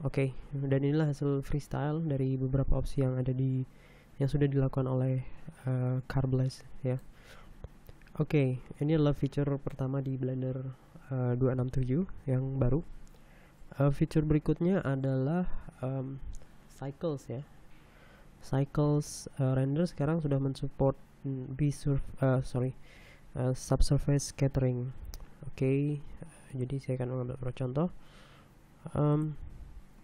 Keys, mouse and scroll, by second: 7.5 middle click, 8.1-8.4 scroll up 1, 27.2 click, 29.8 click.